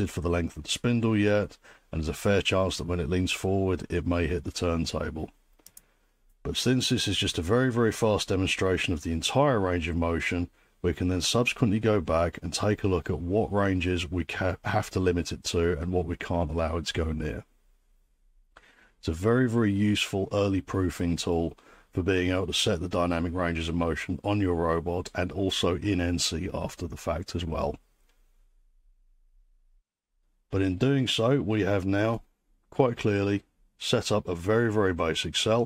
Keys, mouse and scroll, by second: 5.7-10.8 drag.